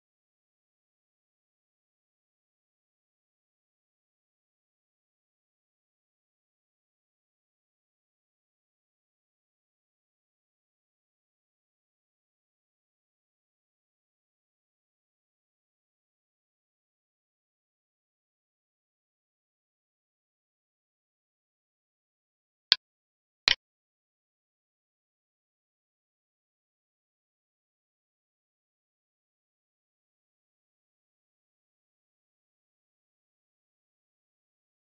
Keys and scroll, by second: 1.5 ctrl+c, 2.2 End, 3.3 ctrl+v, 4.5 ctrl+Left, 6.6 Left, 8.7 ctrl+Right, 9.2 Right, 13.5 ctrl+Right, 16.8 ctrl+space, 19.3 ctrl+s, 26.8 ctrl+s, 28.5 Up, 29.1 ctrl+Right.